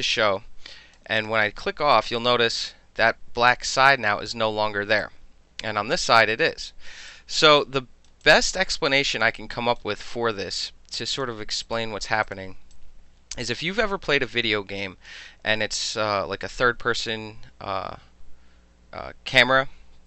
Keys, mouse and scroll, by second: 1.2 click, 2.0-4.1 alt+drag, 5.0-6.0 alt+drag, 7.1 alt+click, 7.4 alt+middle drag, 7.6-8.1 alt+right drag, 8.1 alt+middle click, 8.3-9.2 alt+drag, 9.2 alt+middle click, 9.4-9.8 alt+right drag, 9.8 alt+middle drag, 10.1-11.2 alt+drag, 11.2 alt+middle click, 11.7 click, 12.3 click, 12.8-15.1 alt+drag.